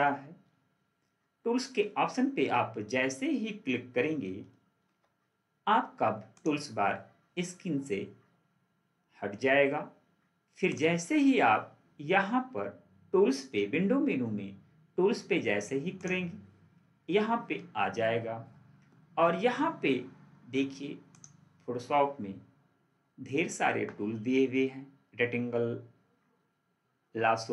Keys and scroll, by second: 4.7 ctrl+4.